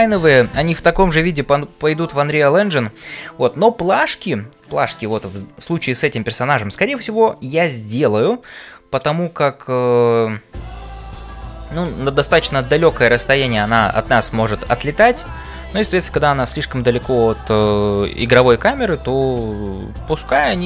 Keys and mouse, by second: 0.0-20.6 typing.